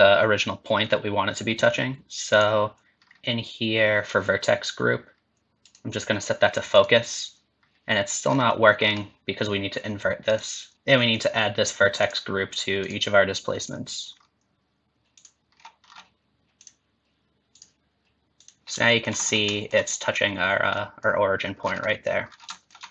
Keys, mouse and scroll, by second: 0.0 scroll up 2, 2.3 click, 3.0-5.3 scroll down 3, 5.6 click, 8.2 scroll down 5, 8.8 scroll up 4, 10.3 click, 12.0 click, 13.6 click, 14.1-15.1 scroll down 3, 15.1 click, 15.5-16.6 scroll down 6, 16.6 click, 18.4 click, 18.6 ctrl+middle click, 18.6 scroll down 10, 18.8 shift+middle click, 19.2 scroll up 3, 19.5 shift+middle click, 20.7 middle click, 21.9 middle click, 22.2 scroll down 2, 22.5 middle click.